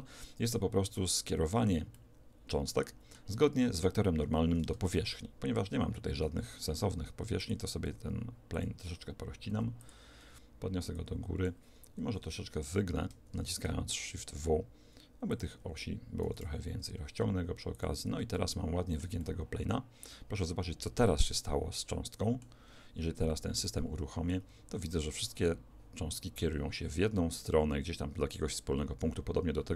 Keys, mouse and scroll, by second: 1.0-2.0 scroll up 1, 2.0-3.7 scroll down 1, 3.7-4.7 middle drag, 4.7 Tab, 6.2 w, 7.9 w, 9.5 w, 10.9-13.1 drag, 12.1 KP_1, 13.3 shift+w, 16.3 s, 18.0 Tab, 18.3-21.1 middle drag, 23.3 alt+a, 23.7-29.7 middle drag.